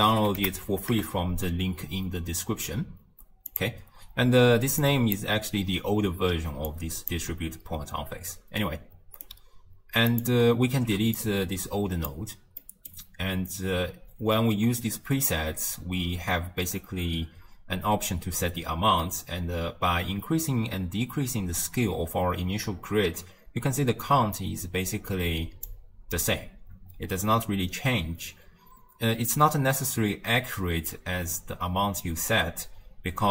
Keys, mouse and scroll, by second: 0.6 Down, 4.7-8.1 typing, 4.8-5.2 drag, 6.7-7.2 drag, 8.4-9.3 right drag, 9.3 d, 10.1 click, 10.8 ctrl+x, 11.2 click, 12.6-15.7 middle drag, 19.2-22.2 drag.